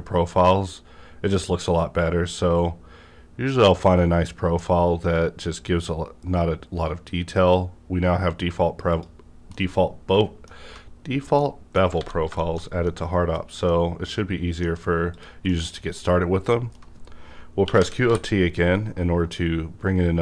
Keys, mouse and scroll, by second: 2.7-4.2 scroll up 1, 4.2-5.7 scroll down 1, 8.9 click, 8.9 scroll down 1, 9.5-11.0 middle drag, 10.9 scroll up 1, 11.4 middle click, 12.0 alt+a, 12.1 middle click, 12.6-13.0 shift+scroll down 2, 13.7-15.5 middle drag, 15.1 click, 15.5-20.2 middle drag, 17.6-18.0 typing.